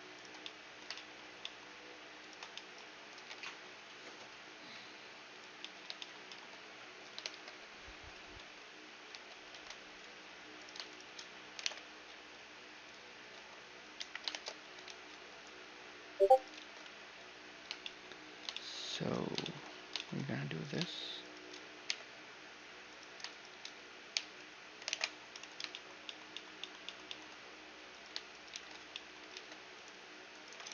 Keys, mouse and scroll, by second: 2.7 ctrl+b, 5.2-7.9 middle drag, 6.8 shift+space, 7.7-9.5 drag, 8.0 Tab, 8.7 Tab, 9.8 middle click, 10.2-12.3 right drag, 11.2 alt+m, 12.9 a, 13.0 middle click, 13.6 KP_1, 13.9 shift+space, 15.9 ctrl+r, 16.2 ctrl+z, 18.0-21.8 middle drag, 20.2-25.1 right drag, 21.5 j, 23.7 j, 24.5 alt+m, 25.3-27.5 middle drag, 27.5 click, 27.5-30.7 right drag, 28.2 shift+r, 28.9 ctrl+Tab, 30.3 ctrl+e.